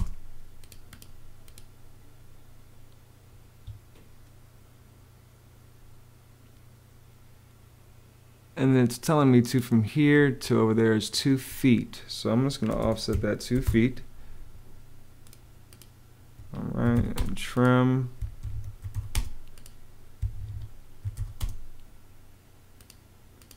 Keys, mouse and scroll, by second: 0.0-0.1 typing, 3.1 Escape, 10.0 Escape, 12.3-13.8 typing, 16.2 Escape, 16.4-17.3 typing, 18.2 Escape, 18.4-19.3 typing, 20.2 Escape, 20.6-21.5 typing.